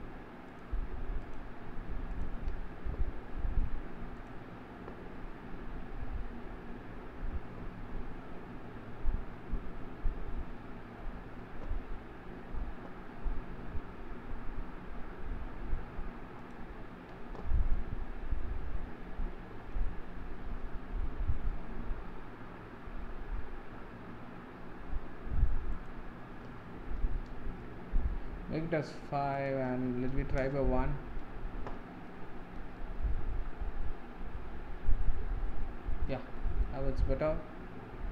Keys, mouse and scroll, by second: 0.5 click, 1.3 click, 2.2 click, 4.2 click, 6.4 scroll down 6, 16.5 click, 17.8-27.5 middle drag, 27.5-32.1 drag, 32.1-35.9 shift+middle drag, 36.5-38.1 shift+middle drag.